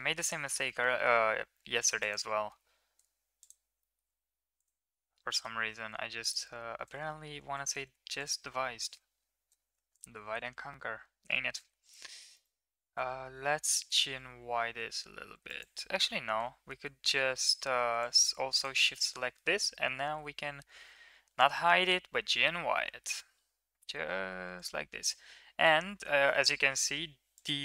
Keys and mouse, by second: 1.8 alt+click, 3.2 alt+shift+click, 3.7 middle click, 5.1 middle click, 6.0 alt+shift+click, 7.0 ctrl+z, 7.2 ctrl+z, 8.5 middle click, 9.7 click, 11.2 g, 12.7 g, 16.2 KP_1, 18.7 middle click, 20.0 h, 21.2 ctrl+z, 21.5 g, 25.6 ctrl+KP_3, 27.2 click.